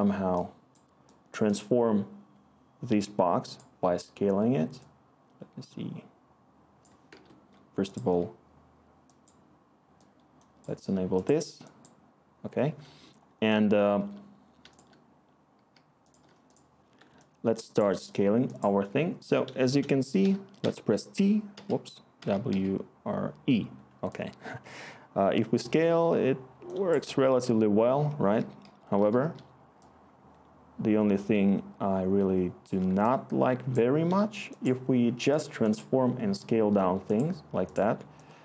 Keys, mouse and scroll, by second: 7.2-8.0 typing, 14.6 r, 15.7-16.2 typing, 17.5 e, 20.2-22.5 typing, 27.2-29.8 typing.